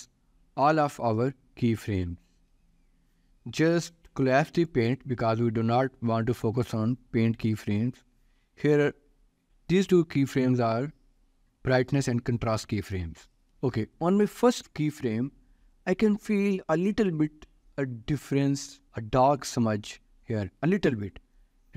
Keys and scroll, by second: 13.5 ctrl+s.